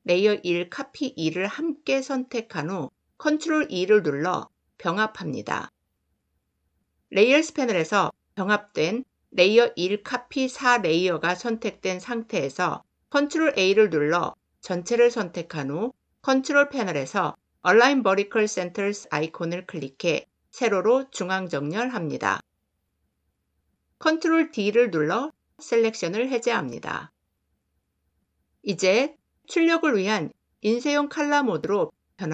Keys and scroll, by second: 3.1 ctrl+e, 13.1 ctrl+a, 24.0 ctrl+d.